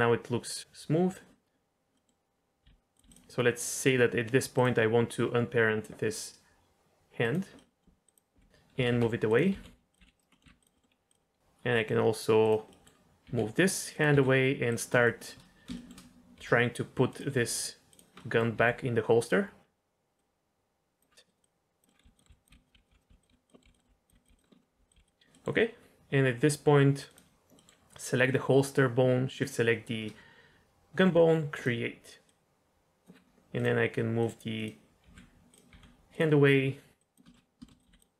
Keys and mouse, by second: 1.9 middle drag, 2.6 r, 3.0 g, 4.5 click, 7.2 click, 7.5 middle drag, 8.0 click, 8.3-11.6 typing, 9.2 click, 10.4 middle click, 10.8 middle click, 12.7 click, 13.2 r, 14.1 g, 15.1 shift+middle click, 15.8 shift+middle click, 16.3 g, 17.3 r, 18.2 middle click, 18.5 g, 20.2-21.0 drag, 21.3 click, 21.4 click, 21.8 middle click, 22.0 middle click, 22.0-24.9 typing, 22.2 middle click, 22.4 click, 23.5 middle click, 23.7 click, 23.8 middle click, 24.0 click, 24.4 click, 24.5 drag, 25.3 drag, 27.6 middle click, 29.4 shift+click, 31.6 click, 32.2-33.0 drag, 34.1 click, 34.5 click, 35.0 g, 35.5 click, 35.7 r, 37.0 click, 37.2 shift+middle click, 37.6 shift+middle click, 37.8 g.